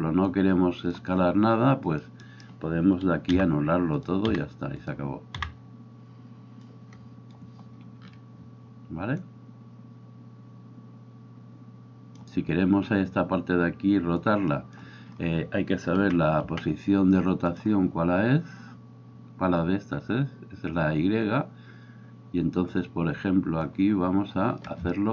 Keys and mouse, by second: 0.3-2.2 drag, 2.2-4.0 middle drag, 3.4 Delete, 4.0-17.6 drag, 16.0 n, 16.5 n, 17.6-22.8 middle drag, 22.8-25.1 drag.